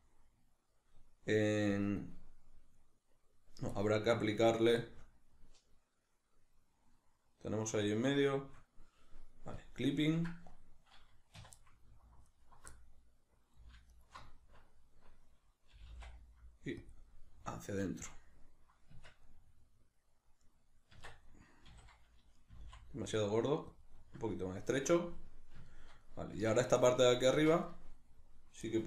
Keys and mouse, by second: 3.8-9.6 middle drag, 9.6-11.4 drag, 11.4 2, 11.6-12.3 middle drag, 12.3 alt+right click, 12.7-13.9 middle drag, 13.9 alt+shift+right click, 14.3-16.9 middle drag, 15.7 g, 16.9 click, 17.1-28.8 middle drag, 18.9 Tab, 20.9 Tab, 21.7 a, 23.9 click, 24.8 Tab, 26.3 Tab, 27.3 Tab.